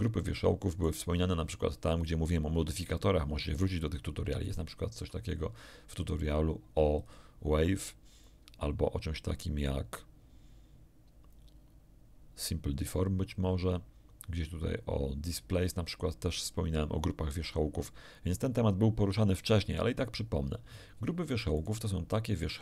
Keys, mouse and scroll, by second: 4.4 shift+middle click, 6.9 click, 21.5 right click, 22.5 shift+right click.